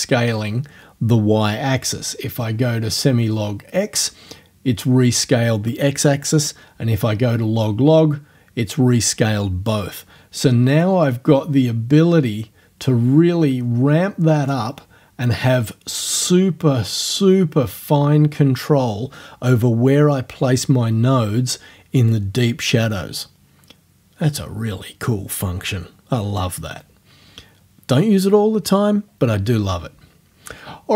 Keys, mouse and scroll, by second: 3.4 scroll up 1, 8.0 scroll up 2, 11.1-14.7 drag, 16.2-22.3 drag.